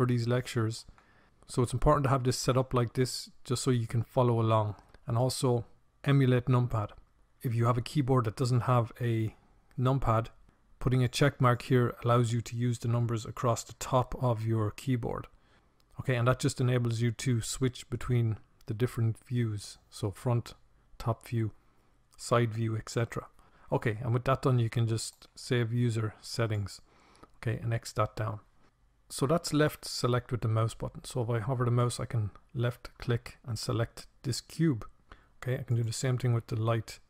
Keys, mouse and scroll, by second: 29.8-35.6 drag.